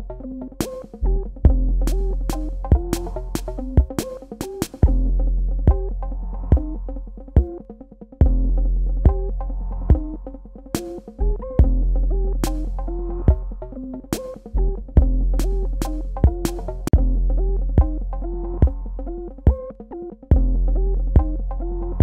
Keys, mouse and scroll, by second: 2.1 click, 5.4 click, 6.0 click, 9.8 ctrl+click, 16.0 ctrl+alt+click.